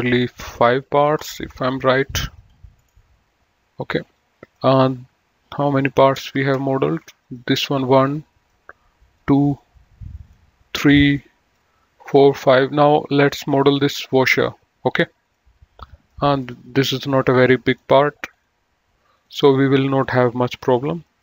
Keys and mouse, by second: 4.4 click, 7.3 click, 11.1 click, 15.4 click, 16.4 middle click, 17.9 click, 20.8 F2.